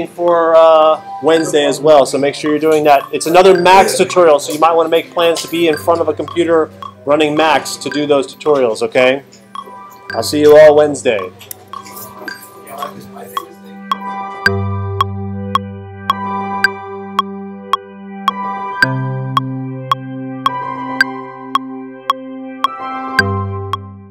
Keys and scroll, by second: 11.5 Right.